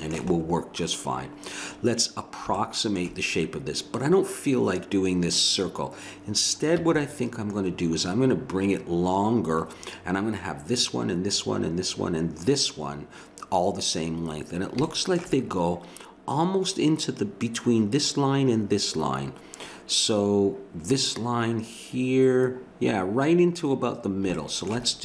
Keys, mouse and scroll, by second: 6.8 a, 12.3-14.4 middle drag, 14.9 middle click, 24.0 middle click, 24.4-25.0 middle drag.